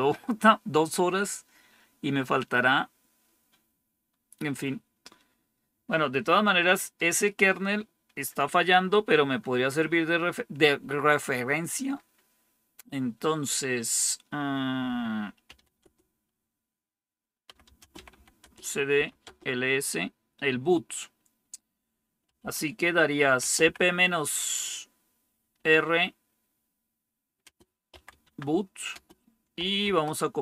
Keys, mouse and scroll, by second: 15.1-16.0 typing, 17.1-19.3 typing, 21.9-23.5 typing, 25.5 typing, 27.3-30.4 typing.